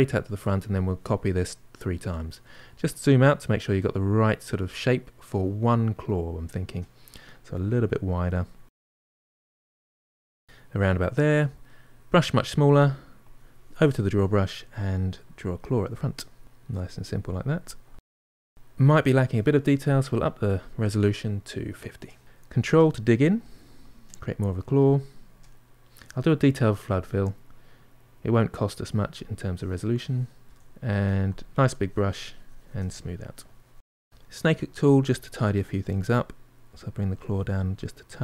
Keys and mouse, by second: 7.1 click, 7.7 middle click, 8.0 click, 8.3 middle click, 8.5 click, 8.6 middle click, 9.0 click, 9.5 middle click, 10.1 click, 10.3-12.0 middle drag, 12.0 f, 13.7 click, 14.1 middle click, 14.4 click, 15.1 middle click, 15.4 click, 16.0 middle click, 16.4 click, 17.1 middle click, 17.4 click, 17.8-22.3 middle drag, 22.3-23.4 drag, 23.4 middle click, 24.0 ctrl+click, 24.7 middle click, 25.0 ctrl+click, 25.2 middle click, 25.5 ctrl+click, 25.8 middle click, 26.1 shift+click, 26.3-28.1 middle drag, 28.1 click, 28.7 middle click, 29.3 g, 29.5 f, 29.9 shift+click, 30.3 middle click, 30.6 shift+click, 30.9 middle click, 31.2 shift+click, 32.0-34.0 middle drag, 34.0 click, 34.7 f, 35.8-37.3 drag, 37.3-38.2 middle drag.